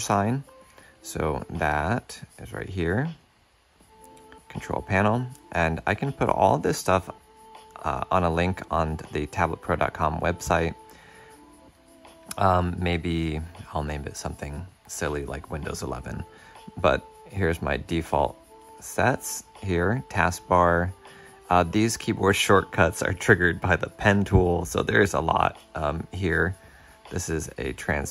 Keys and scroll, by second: 25.7 shift+super+\.